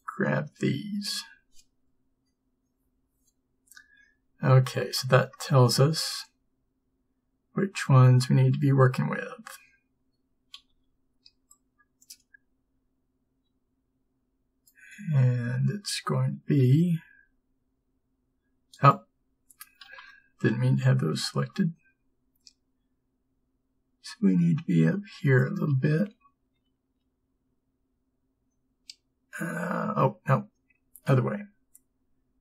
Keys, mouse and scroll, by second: 0.0 b, 16.8 g, 21.6 b, 31.2 g.